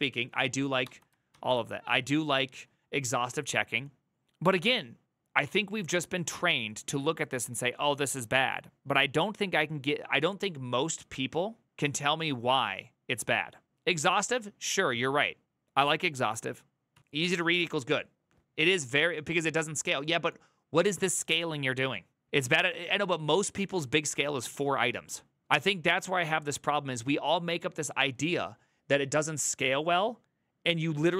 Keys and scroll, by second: 0.6 d, 16.6 alt+[.